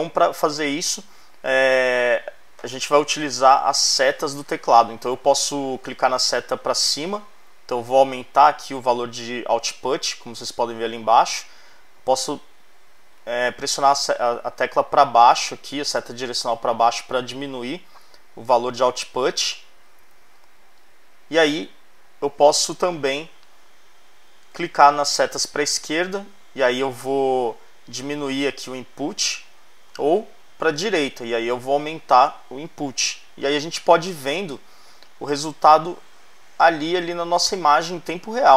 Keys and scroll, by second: 6.8 Up, 11.5 Down, 20.1 Up, 25.5 Left, 29.7 Right, 36.9 Right, 37.4 Left.